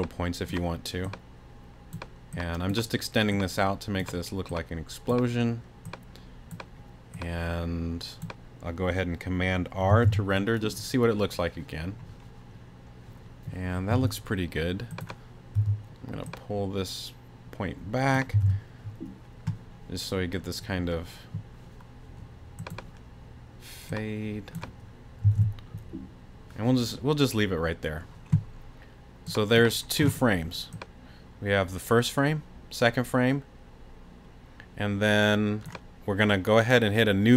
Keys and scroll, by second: 10.0 super+r, 13.9 t, 15.6 t, 18.4 super+r, 25.4 super+r, 26.4 r.